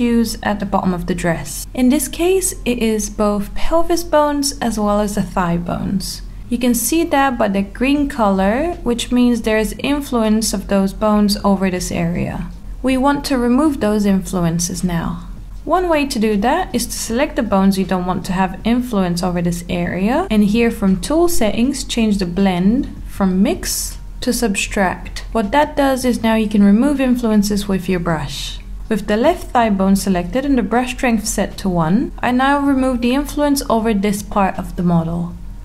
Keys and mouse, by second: 0.7 click, 3.7 click, 5.7 click, 6.5-8.7 middle drag, 9.4 click, 17.2 click, 19.1-23.5 drag, 25.3 click, 25.8 click, 26.2 click, 26.6-27.9 drag, 28.4 alt+middle click, 29.5 click, 29.9 alt+middle click, 30.1 click, 30.6 alt+middle click, 31.2-32.3 drag, 32.4 alt+middle click, 32.9 alt+middle click, 33.7 alt+middle click, 34.1-35.2 drag, 35.4 alt+middle click, 35.5 click.